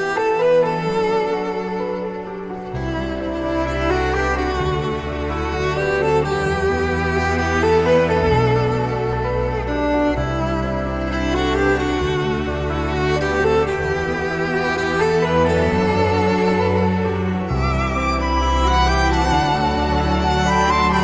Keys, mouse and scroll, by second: 1.7 alt+F9, 3.3 scroll up 1, 3.7 middle click, 4.1 scroll down 1, 5.3 shift+a, 5.7 j, 5.7 o, 7.2 ctrl+z, 7.9 middle click, 11.8-12.9 scroll up 1, 15.4 Return, 15.4 0, 15.6 2, 15.7 0, 15.8 Return, 16.2 middle click.